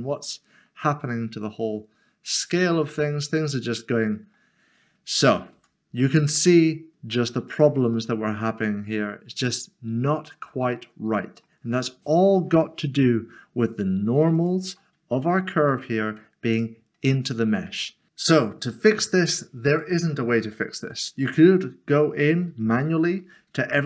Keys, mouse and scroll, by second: 0.2 middle click, 5.5 Tab, 7.5 click, 8.1 middle click, 13.7 click, 15.1 Tab, 15.7 middle click, 17.7 Tab, 18.1 click, 19.7 click, 21.3 middle click, 22.8 ctrl+z.